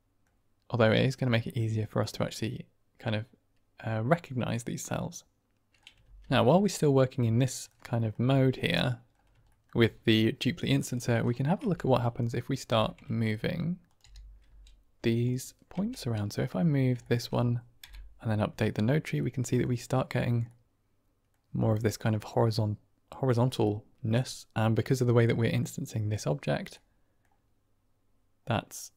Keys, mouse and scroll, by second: 0.8 middle drag, 1.3 shift+middle drag, 1.7-2.8 middle drag, 4.4-5.7 middle drag, 5.9 ctrl+space, 6.7-7.6 middle drag, 7.9 shift+middle drag, 8.5 middle drag, 9.4 shift+drag, 11.5 Tab, 12.0 click, 12.6 g, 13.0 shift+z, 13.8 click, 13.9 r, 14.3 z, 15.1 click, 15.7 Tab, 15.9 middle click, 15.9 drag, 16.1 middle drag, 16.9 shift+middle drag, 18.2 Right, 19.1-19.5 middle drag, 20.4-21.3 middle drag, 22.1 middle click, 23.5-24.1 middle drag, 25.1-25.5 middle drag, 26.6-27.2 middle drag, 28.4-28.9 middle drag.